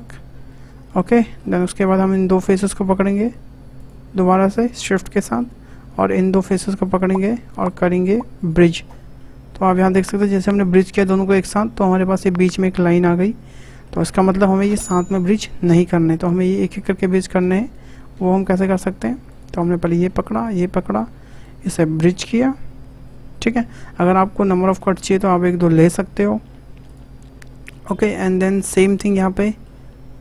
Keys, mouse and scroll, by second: 0.3 scroll down 2, 0.5-1.8 middle drag, 1.8 click, 2.7 ctrl+click, 3.1 ctrl+middle click, 3.7 shift+click, 4.5 shift+click, 4.9-5.9 middle drag, 5.9 shift+click, 6.8 shift+click, 7.6-9.2 right drag, 9.2-12.2 middle drag, 13.5 middle click, 14.1 ctrl+z, 14.1 ctrl+z, 15.1-16.4 middle drag, 16.4 ctrl+click, 18.4 shift+click, 19.3 click, 19.6 middle click, 20.4 shift+click, 21.3-24.6 right drag, 24.6 click, 27.4-27.8 scroll up 2, 27.8-29.0 middle drag, 29.0 click, 29.4 middle click.